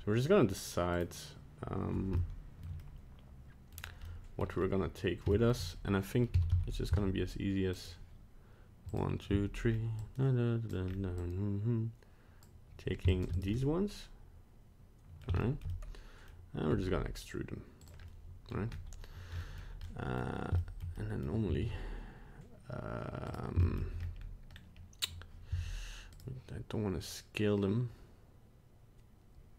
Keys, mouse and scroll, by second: 0.9 right click, 2.1 shift+middle click, 2.8 middle click, 3.7 scroll down 2, 4.0 middle click, 4.6 scroll up 2, 4.9-5.2 scroll down 1, 5.3 shift+middle click, 6.3 a, 6.5 a, 6.9 c, 8.9 click, 9.3 c, 13.5 middle click, 15.5 shift+middle click, 15.7 shift+middle click, 15.7 middle click, 16.7 e, 18.0 middle click, 18.7-19.4 scroll up 1, 19.4 middle click, 19.8 middle click, 20.6 shift+middle click, 20.7 shift+middle click, 20.9 middle click, 21.6 alt+s, 23.6 shift+middle click, 24.0 scroll up 1, 24.2-24.5 scroll down 1, 24.5-25.5 scroll up 1, 25.5 s.